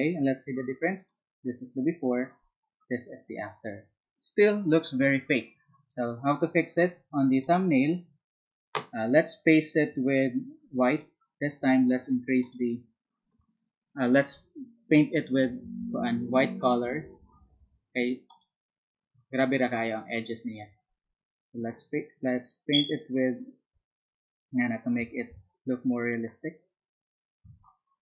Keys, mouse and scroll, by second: 7.3 click, 10.9 click, 11.9 click, 12.4 right click, 13.3 click, 14.3 b, 19.3 click, 21.7-27.6 drag.